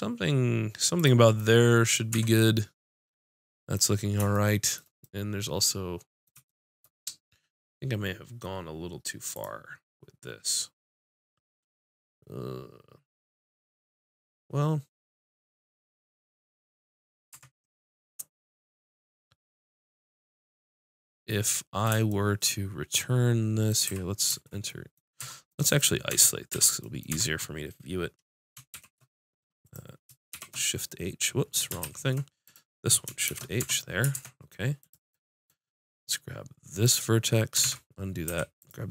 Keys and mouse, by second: 1.0-2.1 drag, 2.1 Tab, 17.4 Tab, 19.4-20.4 middle drag, 21.3-22.6 middle drag, 23.9 z, 25.2 Tab, 26.1 Tab, 26.5 z, 27.1 Tab, 28.7 shift+h, 29.6 click, 30.3 shift+h, 31.8 ctrl+z, 32.5-34.4 drag, 33.3 shift+h, 33.6 Tab, 34.2 ctrl+Tab, 36.9-38.5 drag, 37.6 ctrl+z, 38.3 a.